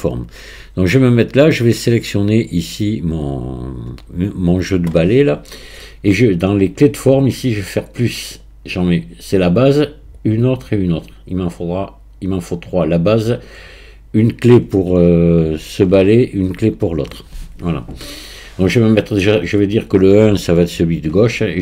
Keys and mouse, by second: 8.3 click, 10.2-12.2 drag.